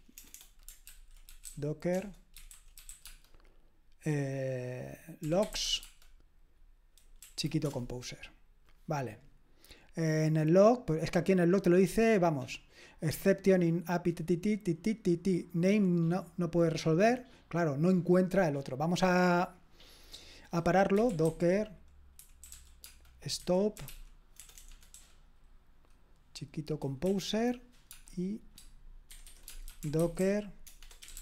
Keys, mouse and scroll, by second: 0.0-3.4 typing, 0.9 ctrl+w, 5.2-6.1 typing, 7.6 Return, 18.8 click, 20.7-24.9 typing, 27.9 space, 29.1-31.2 typing.